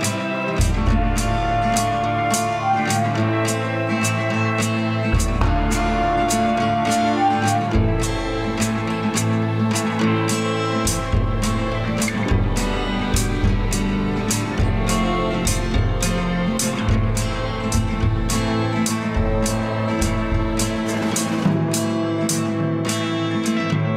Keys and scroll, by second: 3.4 ctrl+=, 6.9 Delete, 14.8 ctrl+z, 20.2 ctrl+0.